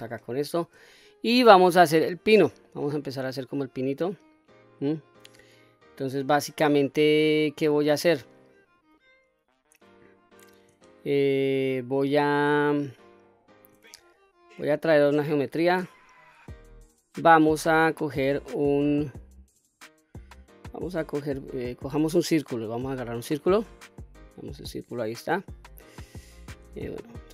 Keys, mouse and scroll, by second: 0.0-0.6 shift+middle drag, 0.8-1.8 scroll up 3, 1.8-2.2 middle drag, 2.7-4.4 middle drag, 5.4-5.9 middle drag, 6.7-7.2 scroll up 1, 7.2-8.1 scroll down 1, 8.6 shift+click, 10.2 shift+right click, 10.8-12.2 middle drag, 13.2 shift+right click, 13.9-14.8 middle drag, 15.4 shift+a, 23.5-24.7 middle drag, 25.0-25.4 scroll down 1, 25.4-25.9 middle drag, 26.1-26.6 scroll up 2, 26.8-27.2 shift+middle drag.